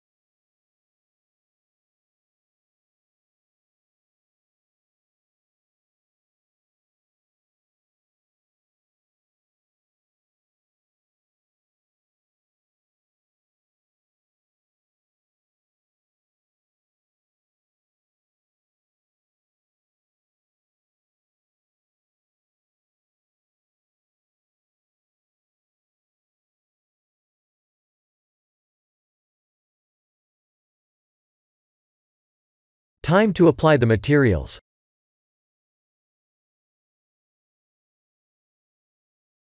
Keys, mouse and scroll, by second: 2.2 click, 3.3 click, 3.7 middle click, 7.8 click, 8.2 click, 8.8 KP_1, 9.4 shift+z, 10.5 scroll up 1, 11.5 scroll down 1, 11.9 scroll down 2, 12.3 shift+middle click, 16.4 shift+middle click, 17.1 scroll up 2, 19.3 Tab, 19.3 scroll up 2, 20.0 3, 21.0 shift+z, 21.4 click, 21.8 middle click, 23.0 shift+click, 24.2 middle click, 25.2 shift+click, 33.4 click, 34.4 click.